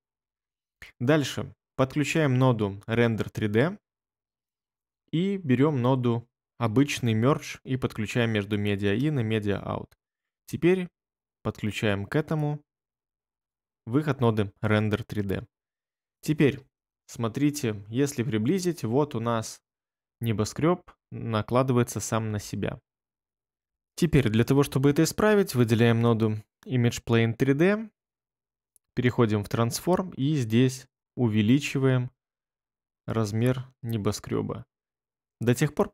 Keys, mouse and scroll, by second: 17.3 ctrl+middle click, 17.4 ctrl+middle click, 17.5 ctrl+middle click, 17.7 ctrl+middle click, 19.5 ctrl+scroll.